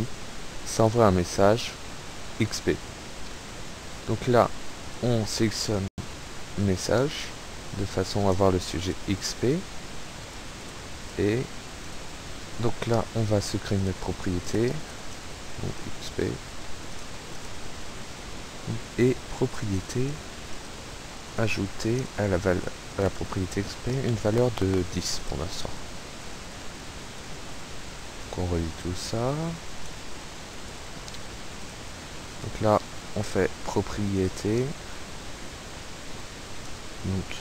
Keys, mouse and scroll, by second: 0.8 click, 2.3 click, 4.9 click, 7.1 click, 7.7 click, 8.0-8.9 typing, 9.2-10.5 drag, 10.7 click, 11.1 click, 11.9 click, 13.9 click, 14.4 click, 15.1-16.0 typing, 16.3 click, 17.4 click, 19.3 click, 20.5 click, 21.1 click, 22.0 click, 22.5 click, 23.1 click, 23.7 KP_1, 23.9 0, 24.2 click, 26.2 click, 28.2 click, 29.8 click, 30.8 click, 31.7 click, 32.2 click, 34.2 click, 36.4 click.